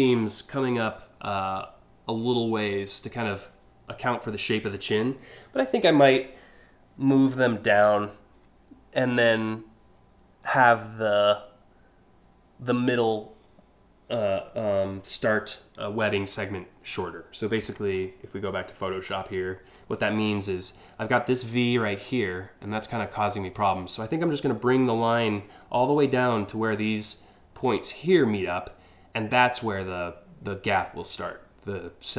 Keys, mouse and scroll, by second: 18.7 click.